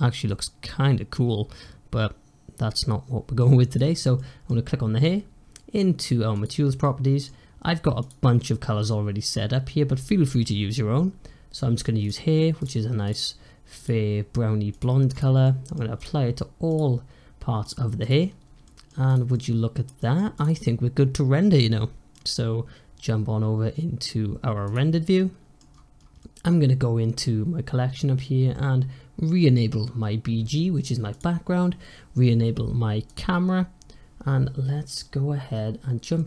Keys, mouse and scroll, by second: 3.6 click, 4.0-6.2 middle drag, 6.2 click, 6.7-7.9 middle drag, 7.9-10.9 drag, 12.5 click, 13.0 click, 13.7-15.1 drag, 15.3-15.9 middle drag, 15.9 click, 16.5-17.9 drag, 18.2-18.5 scroll down 1, 18.5-19.0 middle drag, 19.0 drag, 19.2-20.2 middle drag, 20.2 click, 20.5-23.5 middle drag, 24.5 click, 25.0-25.6 middle drag, 25.6-26.1 scroll down 4, 26.1-27.1 middle drag, 27.1-27.9 scroll up 4, 27.9-30.0 scroll up 2, 31.0 click, 33.0 click, 36.1 middle click.